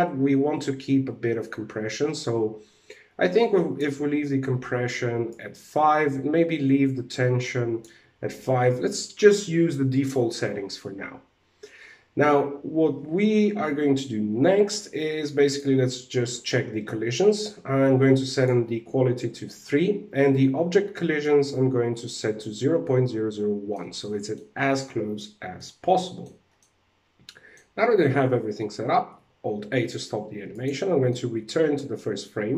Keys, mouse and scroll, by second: 4.8 click, 7.8-9.1 scroll down 3, 9.1-10.0 scroll down 1, 10.7-11.6 scroll down 5, 11.6-12.2 scroll down 1, 12.2-12.5 scroll down 1, 14.5-15.0 scroll down 4, 15.0 click, 15.7 w, 17.8 click, 20.7 click, 23.1 scroll down 1, 23.2 middle click, 25.1 shift+middle click, 26.0 scroll down 2, 26.1 middle click, 28.6 alt+a, 30.0 click, 30.4-30.9 scroll down 2, 30.6 middle click.